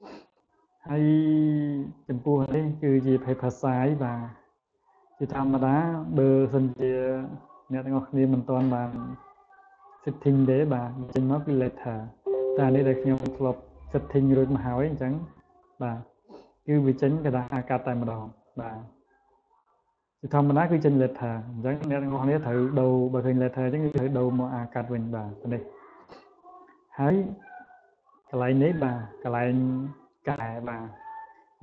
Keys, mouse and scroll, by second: 3.8 click, 17.3 click, 19.0 click, 20.5 click, 22.1 click, 25.5 click, 27.9 click.